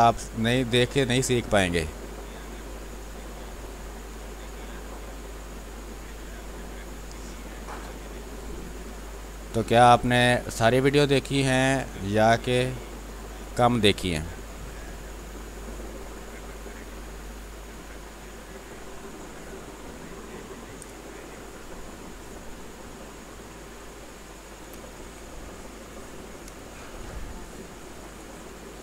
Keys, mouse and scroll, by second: 2.3 space, 2.4 click, 3.8-12.6 drag, 12.6 click, 13.6 space, 14.1 alt+click, 15.2-17.9 drag, 23.1 space, 23.8 alt+click, 26.7 ctrl+d, 27.6 click, 27.9-28.8 typing, 28.1 click.